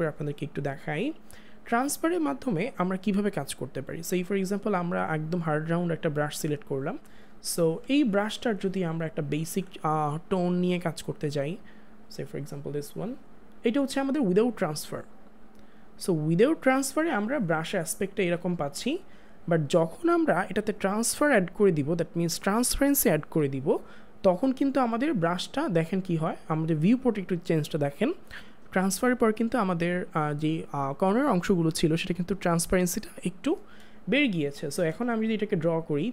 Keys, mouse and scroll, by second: 3.7 click, 4.0 click, 9.3 click, 9.5 ctrl+z, 10.3 click, 15.5 click, 24.7-26.9 drag, 34.2 click, 34.4 space.